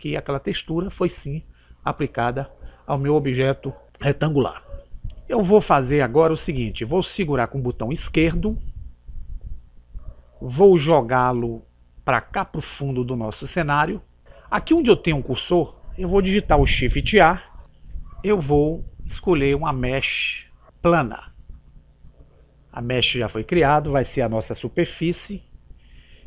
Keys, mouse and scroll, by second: 9.8 click, 17.9 shift+a.